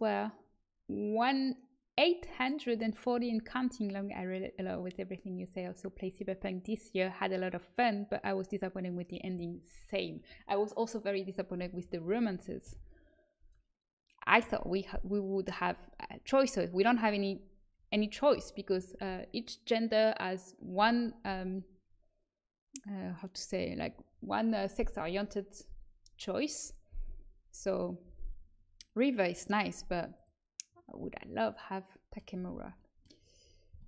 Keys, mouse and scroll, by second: 12.6 Delete, 28.0 Delete, 32.1 middle click.